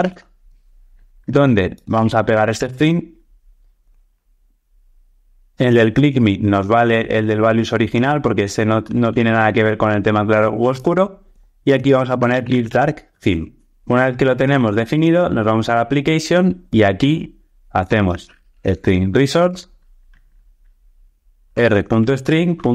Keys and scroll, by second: 1.8 super+c, 8.9 super+BackSpace, 19.4 Return, 21.4 Tab, 22.0 alt+shift+Left.